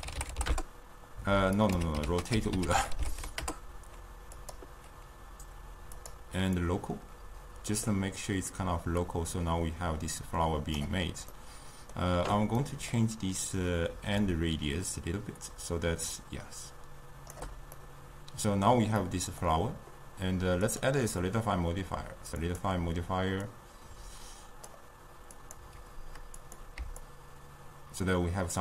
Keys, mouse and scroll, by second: 4.5 ctrl+a, 6.0-11.4 drag, 11.4-14.4 middle drag, 14.4-17.8 shift+drag, 17.8-22.6 middle drag, 22.6-25.5 drag, 27.2-28.6 shift+drag.